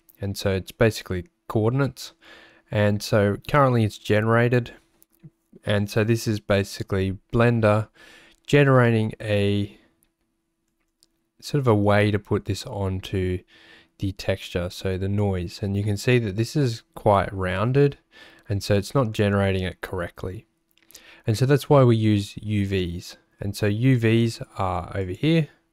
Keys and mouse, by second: 14.7 click.